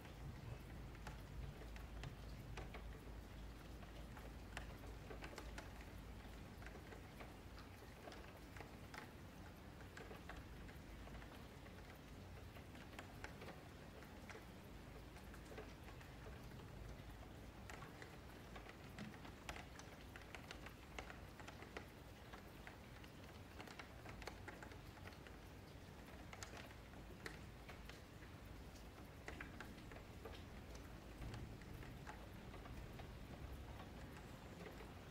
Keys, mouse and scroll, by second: 0.0 ctrl+a, 1.1 middle click, 1.6 Tab, 1.8-3.3 middle drag, 3.3 Tab, 3.6 a, 3.8 a, 4.0-5.0 scroll down 8, 4.2 middle click, 5.0-5.5 scroll up 4, 5.5-6.1 scroll down 7, 6.1-7.3 middle drag, 7.3 scroll up 4, 7.4-10.2 middle drag, 10.2-11.5 scroll down 1, 11.5 click, 11.9 click, 12.2 F3, 12.7-13.3 scroll up 4, 13.3-14.0 shift+middle drag, 14.0 shift+right click, 14.5 shift+right click, 14.9 a, 17.1-22.9 drag, 22.9-23.9 scroll up 1, 23.9-25.8 drag, 25.8-26.2 middle drag, 26.2-27.0 scroll down 4, 27.0 click, 27.6 middle click, 28.0-29.3 scroll up 10, 28.2 F3, 29.3 Tab, 29.8 middle click, 30.2 1, 30.5 click, 30.9 shift+click, 31.4 j, 31.6-32.9 middle drag, 32.9 click, 33.4 shift+click, 33.6 j, 33.8-34.8 middle drag, 34.8 2.